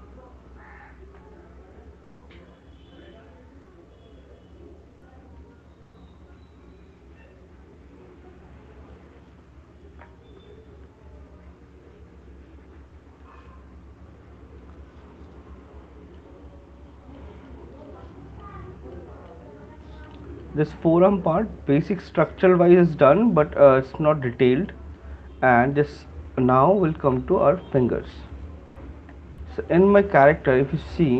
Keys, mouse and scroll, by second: 1.6 alt+click, 2.5 click, 3.5 click, 4.9 click, 5.3 click, 9.0 shift+click, 10.7 alt+click, 11.1 shift+click, 13.4 shift+click, 15.0 alt+click, 18.1 alt+click, 18.3 alt+click, 19.3 shift+click, 20.3 alt+click, 20.7 alt+click, 22.4 click, 25.5 click, 26.4 alt+click, 26.9 right click, 27.1 alt+click, 28.0 click, 29.3 right click, 30.1 alt+click.